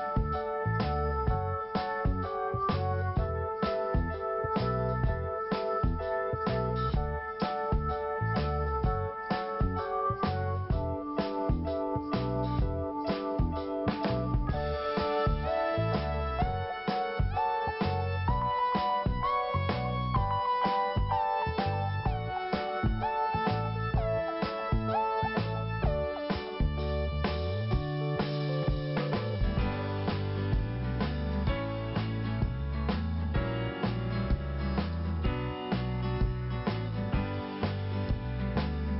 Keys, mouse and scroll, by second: 0.7 Delete, 1.5 scroll down 1, 2.2 scroll up 1, 2.9 click, 4.3 Delete, 4.7 scroll down 1, 5.4 scroll up 1, 6.0 click, 6.7 Delete, 7.4 scroll down 1, 8.7 p, 9.8 click, 15.9 click, 19.8 scroll down 1, 20.3 scroll up 1, 21.3 click, 21.4 click, 22.3 click, 22.4 click, 22.5 click, 22.6 click, 30.0 scroll down 1, 31.2 click, 32.6 scroll up 1, 34.3 click, 35.7 click, 35.8 click, 36.9 click, 37.0 click, 38.0 click.